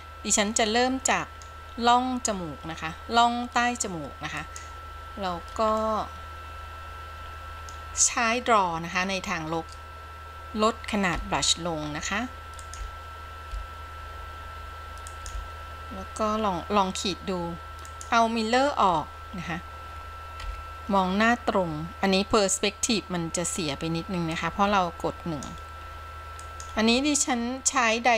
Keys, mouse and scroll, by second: 0.8 middle click, 4.5 click, 5.9-8.0 middle drag, 11.3 f, 12.8 f, 13.7 f, 15.3 f, 18.9 click, 20.6 KP_1, 24.5-25.7 drag, 26.6-27.0 drag.